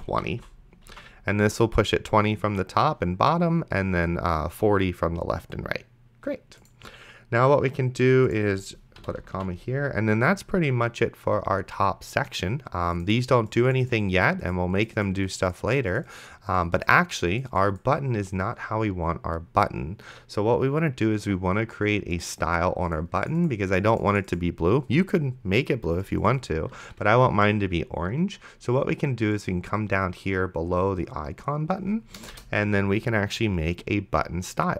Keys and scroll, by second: 0.0-0.4 typing, 1.2 ctrl+s, 9.6 ctrl+s, 32.5 Return.